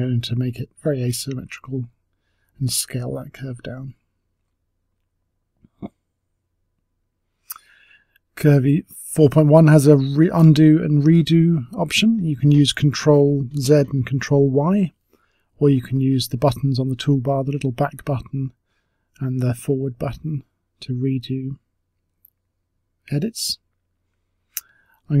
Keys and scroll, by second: 0.2-1.2 typing, 3.0 w, 4.3 space, 4.7 space, 7.7 Delete, 11.1 ctrl+z, 11.4 ctrl+z, 13.0 ctrl+y, 24.0 space.